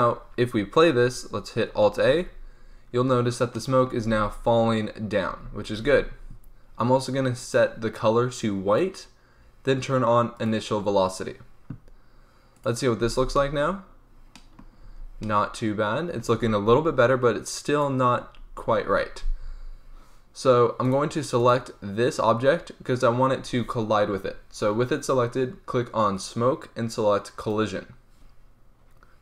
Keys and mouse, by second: 2.1 alt+a, 3.1 click, 3.5 click, 4.0 z, 5.2 z, 5.7 alt+a, 10.3-14.3 drag, 13.0 alt+a, 14.8 z, 16.2 z, 16.4 alt+a, 20.8-24.5 drag, 26.1-29.2 drag.